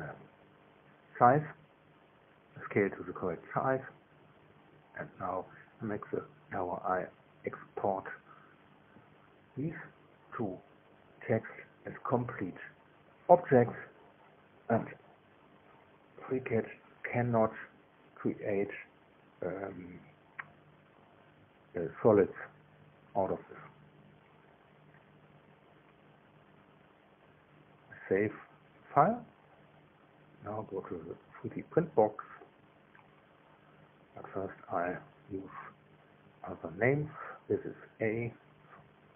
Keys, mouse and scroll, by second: 16.1 click, 19.1 click, 20.9 click, 22.1 click, 24.5-26.5 typing, 27.0 Return, 27.9 Return, 29.3 right click, 30.1 right click, 30.8 right click, 31.5 right click, 36.3 click, 37.0 click, 38.6 shift+a.